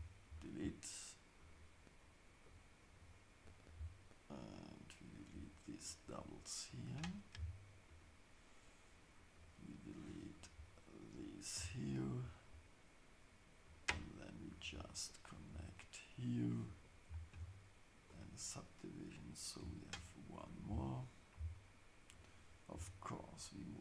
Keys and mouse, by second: 3.0 shift+click, 4.3-5.3 shift+drag, 5.9-8.0 shift+drag, 7.3 x, 9.3 click, 10.3 shift+click, 11.5 x, 14.5 shift+click, 15.5 f, 17.3 ctrl+shift+s, 19.1 click, 19.6 x, 22.1 click, 22.7 g.